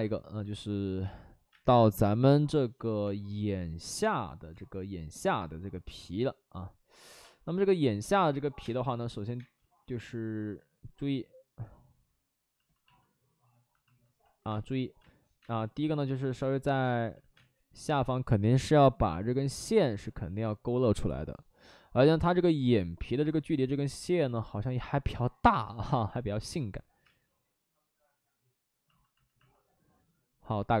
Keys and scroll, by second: 1.0 space, 1.4 space, 3.0 space, 3.0 3, 4.5 ctrl+z, 7.1 space, 8.5 5, 8.5 space, 9.3 space, 9.6 ctrl+z, 14.2 ctrl+z, 14.4 space, 14.9 space, 15.3 space, 16.8 space, 17.1 ctrl+z, 17.3 space, 18.4 ctrl+z, 22.8 ctrl+z, 25.4 space, 25.8 space, 27.7 space.